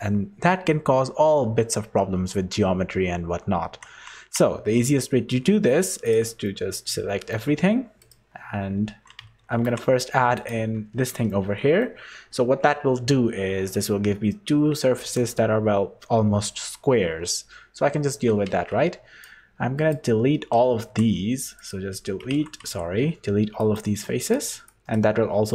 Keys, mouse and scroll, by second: 3.8 Tab, 4.5 3, 5.3 middle click, 6.0 click, 6.4 middle click, 8.0 right click, 9.6 ctrl+r, 11.3 middle click, 11.9 KP_1, 15.0 3, 15.1 click, 17.4-18.0 scroll up 1, 18.5 z, 19.2 click, 20.9 x, 22.3 ctrl+z, 22.6 x, 24.2 click, 24.6 click.